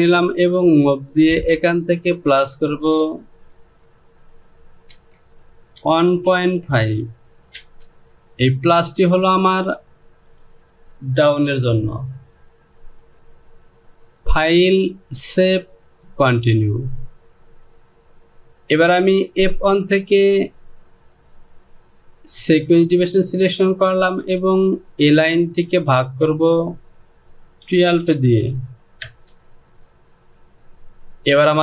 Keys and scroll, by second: 4.8 KP_0, 5.1 Down, 5.7 KP_1, 6.2 KP_Decimal, 6.7 KP_5, 7.5 Return, 27.6 KP_1, 28.9 Return.